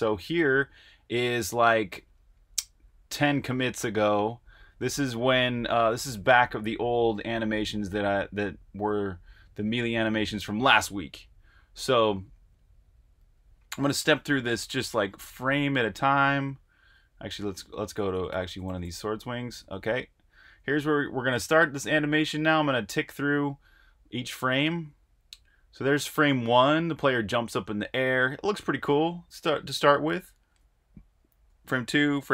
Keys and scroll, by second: 11.5 Right, 11.9 Right, 12.2 Right, 12.5 Right, 13.1 Right, 13.3 Right, 13.5 Right, 13.7 Right, 13.8-16.8 typing, 21.4-22.2 typing, 24.6 Tab, 24.6 typing, 25.0 Tab, 30.3 Tab, 31.5 Tab.